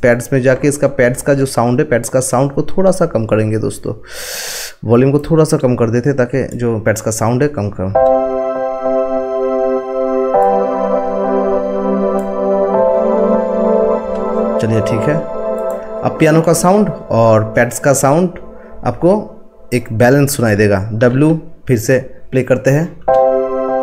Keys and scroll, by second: 21.0 w.